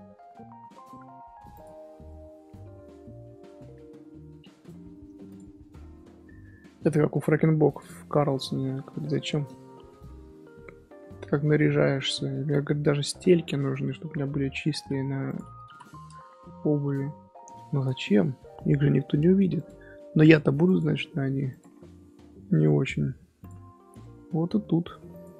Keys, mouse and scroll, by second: 1.5 click, 2.0-4.2 middle drag, 4.2 alt+h, 5.2 click, 5.9-7.7 middle drag, 7.7 click, 8.2-8.8 shift+middle drag, 8.8 Tab, 9.1-11.2 shift+middle drag, 11.2-11.5 scroll down 1, 11.5 Tab, 12.7-15.2 middle drag, 15.2-18.2 drag, 19.5-21.9 drag, 21.9-23.4 middle drag, 23.4 click, 24.0-25.1 middle drag, 25.1 click.